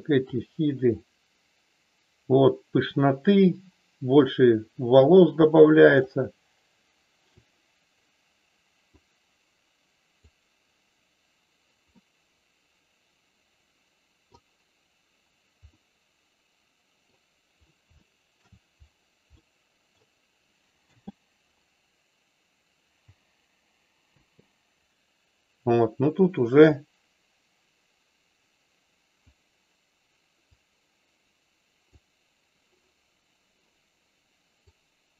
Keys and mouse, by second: 0.2-7.2 drag, 9.1-11.1 drag, 11.9-14.3 middle drag, 15.8-17.1 middle drag, 17.9 shift+middle click, 19.3 middle click, 20.8 space, 24.3 space, 26.8-32.7 drag, 34.8 click.